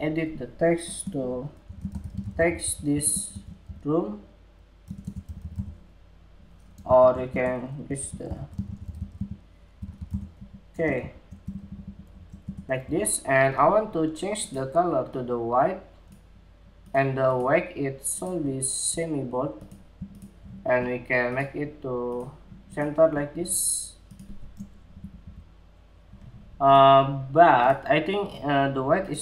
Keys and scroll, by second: 6.5 super+a, 10.4 Escape.